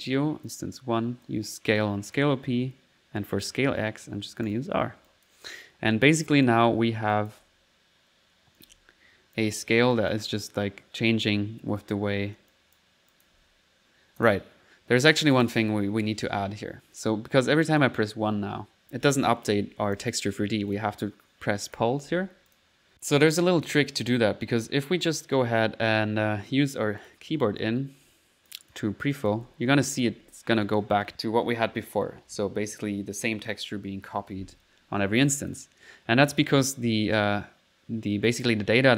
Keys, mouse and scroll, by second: 0.4-0.7 typing, 0.5 click, 1.3-2.3 drag, 3.5 click, 4.5 click, 5.1 click, 5.8 middle click, 6.1-7.5 typing, 6.3 click, 7.2 click, 8.7 typing, 9.2 middle click, 9.4-10.6 drag, 12.0 alt+1, 12.5-13.4 typing, 12.5 click, 13.1 click, 13.9 middle click, 14.2 click, 14.8 middle click, 15.4 click, 15.8 click, 16.6 alt+1, 17.3 1, 17.7 click, 19.0 1, 19.6 1, 20.0 click, 20.7 click, 21.1 middle click, 21.7 click, 22.5 click, 22.8 typing, 22.9 middle click, 23.4 click, 25.2 click, 26.4 middle click, 27.0 click, 27.6 click, 29.2 click, 29.4-31.1 typing, 29.9 click, 30.4 middle click, 30.7 click, 35.3 click, 36.6 middle click, 38.3 click.